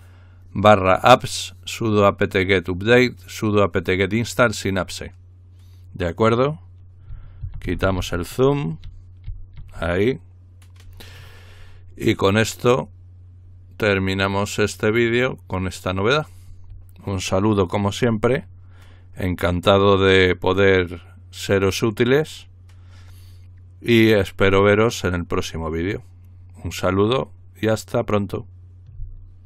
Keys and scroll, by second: 8.8-9.3 typing.